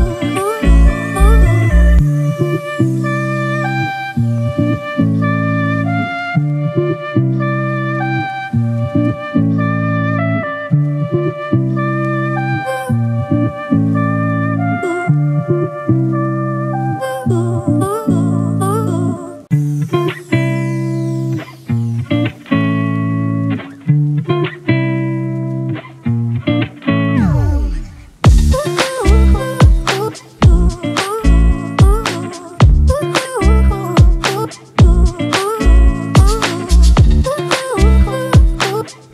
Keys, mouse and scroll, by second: 2.6 alt+click, 8.1-9.1 typing, 24.7 double click, 27.1 double click, 37.5 double click.